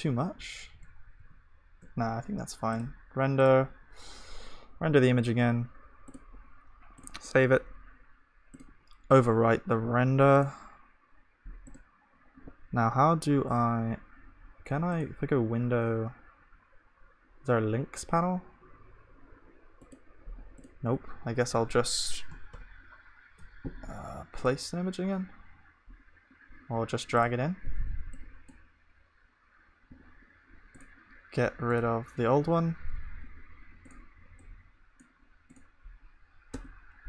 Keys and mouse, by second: 0.0 ctrl+z, 1.2 ctrl+shift+z, 3.3-37.0 drag.